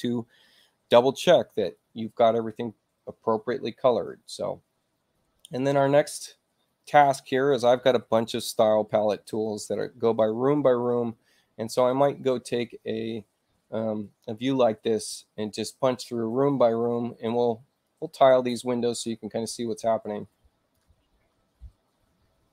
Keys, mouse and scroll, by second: 11.8 click, 17.8-20.7 drag.